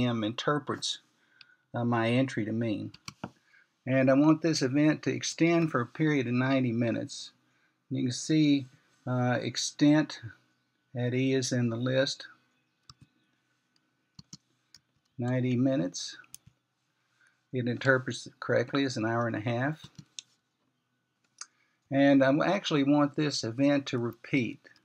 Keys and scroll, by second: 6.6 typing, 14.6 typing, 15.6 typing, 16.6 typing, 17.6 typing.